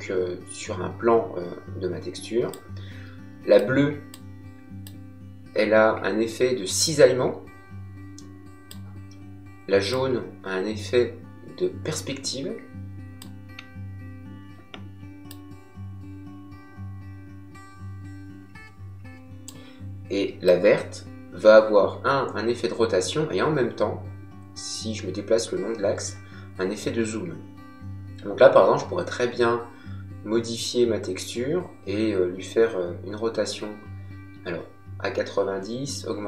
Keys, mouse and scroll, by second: 3.5 click, 9.9 click, 15.3 click, 20.4 click.